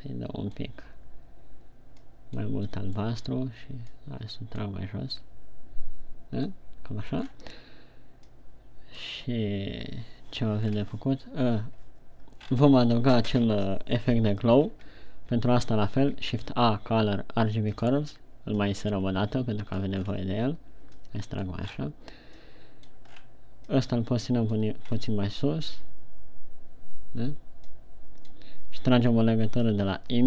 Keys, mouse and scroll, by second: 12.1-16.8 scroll down 4.